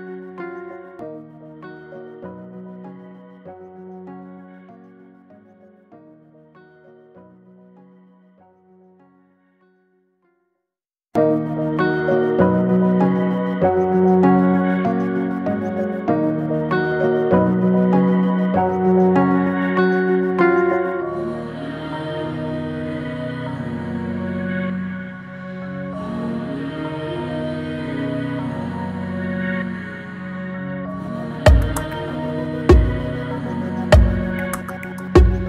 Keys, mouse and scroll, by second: 0.7 Tab, 0.9 scroll down 1, 2.6 alt+z, 2.9 scroll down 1, 3.1 click, 3.4-4.1 middle drag, 4.1 drag, 4.5 shift+click, 6.4 ctrl+j, 7.3 click, 8.1 click, 8.5 scroll down 2, 9.0 click, 9.7 scroll down 2, 10.0 alt+middle click, 10.4 scroll down 1, 10.7-11.7 shift+middle drag, 11.7 shift+d, 14.8 alt+middle drag, 15.9 shift+click, 16.4 shift+middle click, 17.0 shift+d, 19.7-20.2 drag, 20.2-20.9 middle drag, 20.9 scroll down 2, 21.2 middle drag, 21.5 click, 21.6 scroll down 1, 21.8-22.8 middle drag, 22.8 click, 23.1-23.7 scroll up 2, 23.2-23.6 middle drag, 23.9-24.3 middle drag, 24.3 click, 24.8-25.3 shift+middle drag, 25.3 Tab, 25.8 click, 27.1 ctrl+r, 31.6 click, 32.4 click, 33.1 g, 34.4 click, 34.9 middle click, 35.3 scroll up 2.